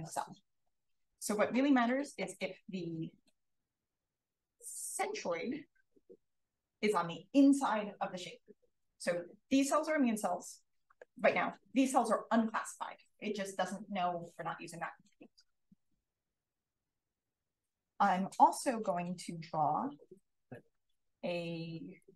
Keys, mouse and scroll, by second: 18.9 click, 20.9 b, 22.0-22.1 drag.